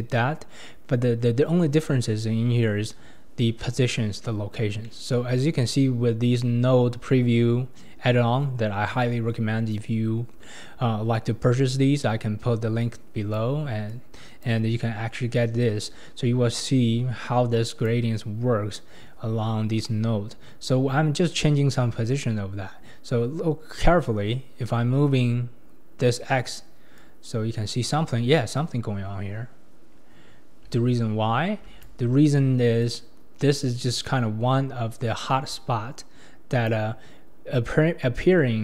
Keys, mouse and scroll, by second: 0.3-1.4 scroll down 2, 1.4-2.2 scroll up 3, 2.2-4.3 scroll up 2, 4.5-4.8 scroll down 3, 4.8-7.9 middle drag, 12.8-13.9 drag, 17.6-19.5 drag, 22.3-23.5 scroll up 4, 27.0-30.0 drag, 32.8-35.8 drag, 38.2-38.6 scroll down 9.